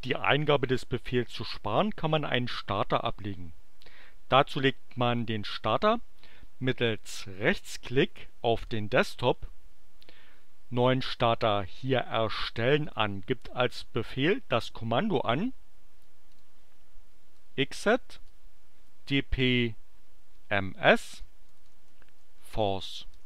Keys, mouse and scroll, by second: 8.6 right click, 12.8 click, 16.2 click, 16.9-19.2 typing, 20.5-23.2 typing.